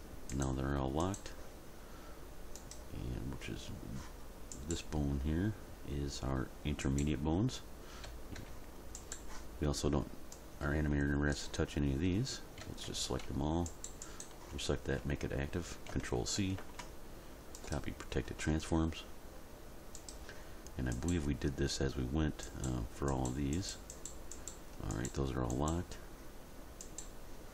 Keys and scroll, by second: 8.0 a, 12.6 a, 16.6 ctrl+c.